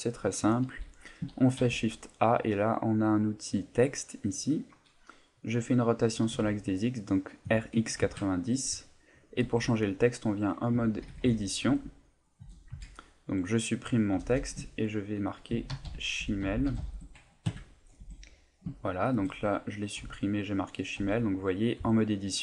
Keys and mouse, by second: 0.1 shift+middle click, 1.6 shift+a, 6.2 r, 9.4 Tab, 10.7 BackSpace, 11.6 z, 12.4 BackSpace, 15.5-16.8 typing, 17.5 KP_Enter, 18.0 Tab, 18.8 shift+middle click, 20.0 z, 21.0 Tab.